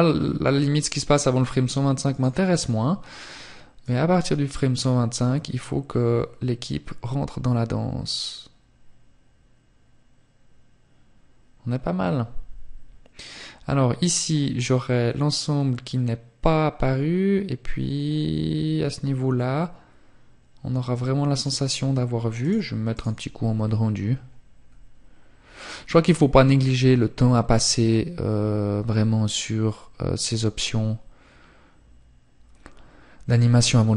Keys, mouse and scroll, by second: 0.8 click.